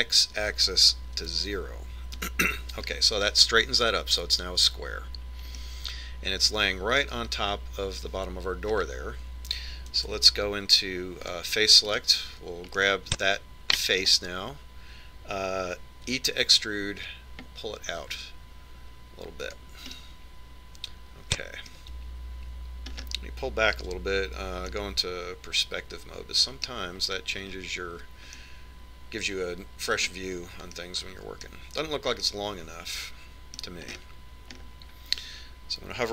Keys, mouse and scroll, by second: 7.3-9.1 middle drag, 9.1-10.4 scroll down 1, 10.4 scroll up 1, 10.6-12.5 middle drag, 11.9 ctrl+Tab, 13.7 right click, 14.5-16.5 middle drag, 17.9 e, 21.7-23.5 middle drag, 24.7-28.4 middle drag, 25.7 KP_5, 29.1-30.6 middle drag, 32.0-32.6 scroll down 1, 35.7 middle click, 35.9-36.1 scroll up 1.